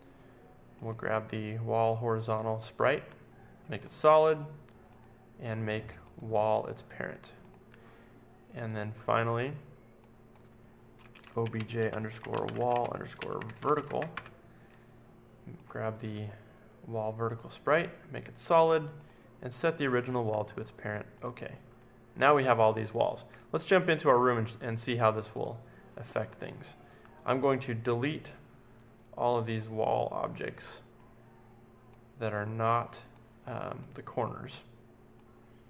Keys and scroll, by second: 10.8-14.6 typing.